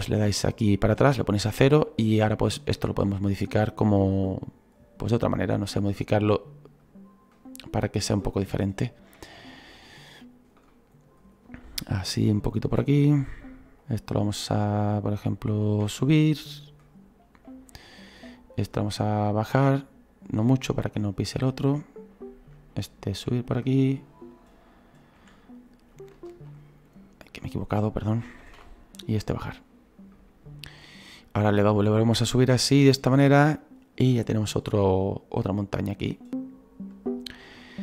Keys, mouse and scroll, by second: 2.2 right click, 2.9-4.4 drag, 4.4 right click, 5.1-6.1 drag, 6.1 right click, 6.8-8.4 drag, 8.4 shift+middle click, 9.2 right click, 9.7 click, 10.7 middle click, 11.4 scroll down 2, 11.6 shift+middle click, 12.1 scroll up 2, 12.7 right click, 13.1 shift+middle click, 13.8 shift+right click, 14.3-15.8 shift+right drag, 15.8 e, 17.0-17.4 scroll down 2, 17.4 middle click, 18.2 right click, 18.8-20.5 drag, 20.5-21.7 middle drag, 21.7-23.1 right drag, 23.1 e, 24.1-25.1 right drag, 25.1 e, 27.6 click, 28.4 ctrl+z, 29.2-37.8 drag.